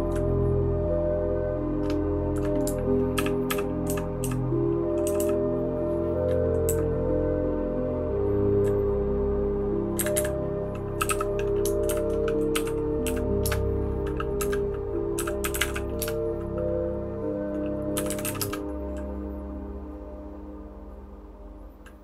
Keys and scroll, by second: 3.1-5.1 typing, 6.6 Escape, 6.6 Down, 7.1-8.6 Down, 9.9 Up, 10.1 Up, 10.7-11.5 typing.